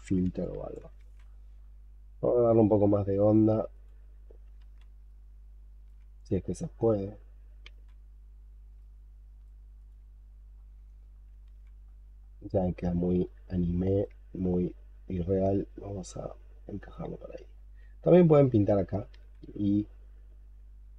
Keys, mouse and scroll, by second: 0.3 alt+click, 0.9 ctrl+z, 1.1-4.3 scroll up 8, 4.5 ctrl+z, 4.9 ctrl+right click, 7.5 ctrl+z, 8.6 ctrl+right click, 10.4-11.2 scroll down 9, 11.3 ctrl+z, 11.7-12.9 ctrl+scroll up 7, 13.1 ctrl+right click, 19.0 ctrl+z.